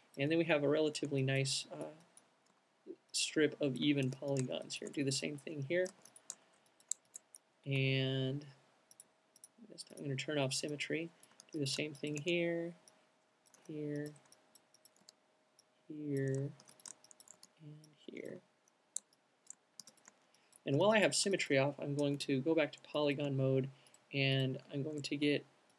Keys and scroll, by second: 2.0 alt+shift+q, 4.1 alt+shift+c, 5.0 alt+shift+q, 6.1 alt+shift+c, 7.7 alt+shift+q, 10.9 alt+q, 13.7 alt+c, 15.1 alt+q, 16.7 alt+c, 17.4 alt+q, 20.9 alt+shift+q, 25.4 typing.